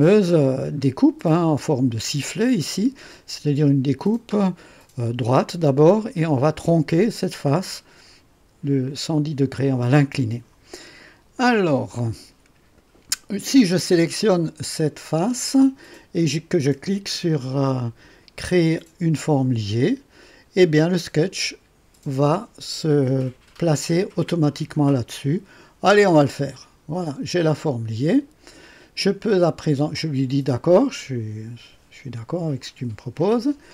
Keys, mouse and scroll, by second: 1.2 click, 11.3 click, 14.0 click, 26.4 click, 32.6 click.